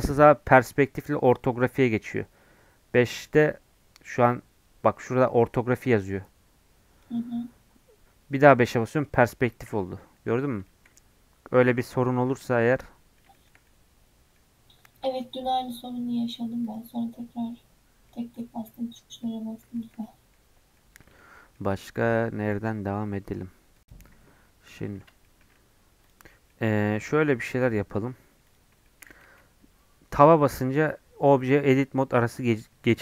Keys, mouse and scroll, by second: 1.0 KP_5, 1.8 KP_5, 6.1-8.1 drag, 8.1 KP_5, 10.7-17.6 shift+middle drag, 17.6-18.0 scroll down 5, 18.1 middle click, 18.4 scroll up 2, 18.7 middle click, 19.4-19.8 scroll up 2, 19.8-22.7 shift+middle drag, 22.7 Tab, 23.8 click, 24.6 scroll down 1, 24.7 middle click, 25.0 scroll up 1, 25.2 shift+middle click, 26.0 click, 26.2 scroll up 3, 26.4-28.4 middle drag, 28.4 click, 28.8 shift+middle click, 29.2 Tab.